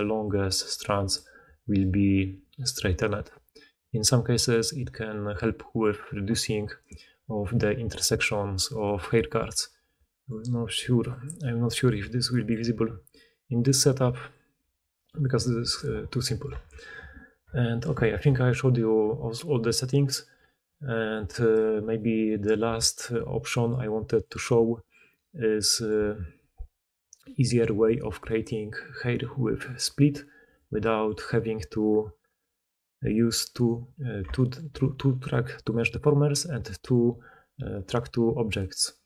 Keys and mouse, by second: 1.1 d, 1.3-3.1 d, 5.9-10.6 drag, 9.4 Tab, 10.4 r, 11.1-14.9 middle drag, 11.3 g, 11.9 r, 12.5 g, 14.5 r, 15.3 g, 16.5 Tab, 16.7 click, 19.5-21.7 middle drag, 21.7 right click, 21.9-22.3 middle drag, 22.6 r, 23.7 g, 24.9-26.6 middle drag, 26.6 click, 26.8-27.7 middle drag, 27.7 click, 27.8-28.2 middle drag, 28.2 click, 28.3-30.4 middle drag, 30.4 click, 30.5-32.9 middle drag, 32.9 click, 33.1-33.4 middle drag, 33.4 click, 33.7-35.5 middle drag, 35.5-36.6 drag, 36.6-39.0 middle drag, 36.7 g.